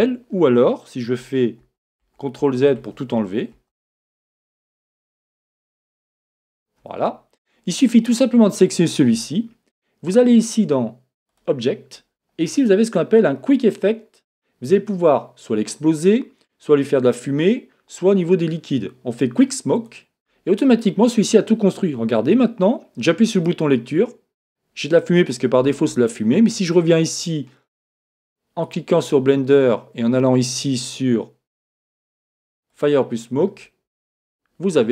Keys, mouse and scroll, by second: 1.7 super+z, 2.0 super+z, 2.4 super+z, 2.8 super+z, 3.1 super+z, 3.5 super+z, 4.2 super+z, 4.7-6.3 typing, 23.3-27.3 drag, 28.7 right click, 31.6 click.